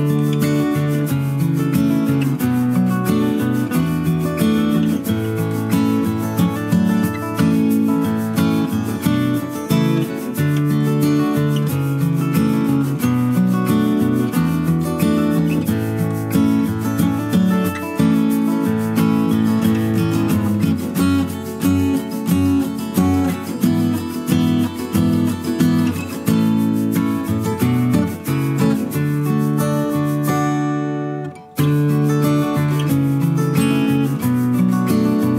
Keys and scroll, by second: 33.9 ctrl+k.